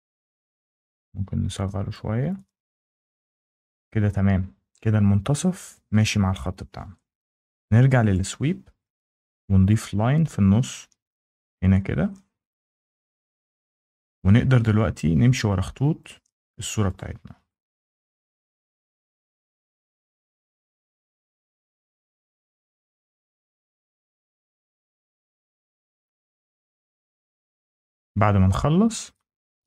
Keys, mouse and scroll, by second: 2.2 click, 2.6 scroll down 1, 2.9 Down, 3.5-4.0 scroll down 2, 8.0 click, 9.6 click, 11.1 click, 12.9 click, 13.4-13.9 scroll, 14.2 scroll down 7, 14.2 scroll, 14.5 Escape, 14.5 scroll up 4, 14.9 scroll down 1, 15.0 scroll, 15.9 click, 16.8 click, 17.4 click, 18.2 click, 18.9 click, 19.9 click, 20.5 click, 21.2 click, 22.1 click, 23.0 click, 24.0 click, 25.0 click, 26.1 click, 27.2 click, 27.6-28.5 scroll down 5, 28.5 Escape.